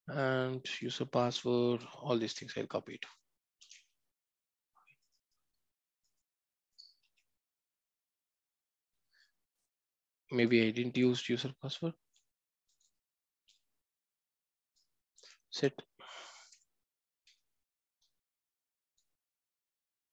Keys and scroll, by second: 2.2 ctrl+x.